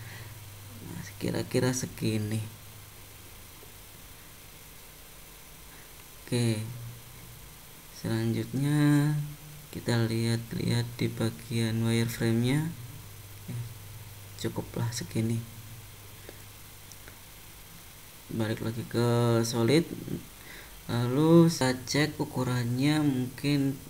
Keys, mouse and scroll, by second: 0.3 middle click, 3.5 middle click, 5.7 click, 6.5 middle click, 9.9 middle click, 12.4 click, 12.9 middle click, 19.0 click.